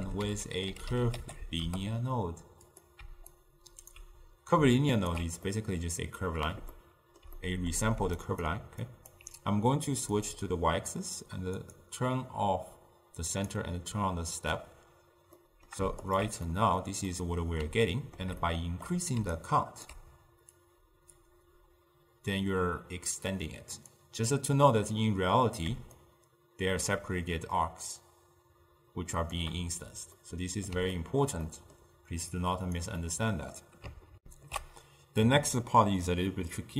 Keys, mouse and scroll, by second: 1.7 ctrl+a, 4.0-5.0 alt+right drag, 5.0 alt+shift+click, 5.6-8.2 middle drag, 8.2-16.2 drag, 17.2-19.4 middle drag, 19.4-20.7 right drag, 20.7-23.7 drag, 26.2-34.2 shift+drag, 34.2 ctrl+alt+shift+q.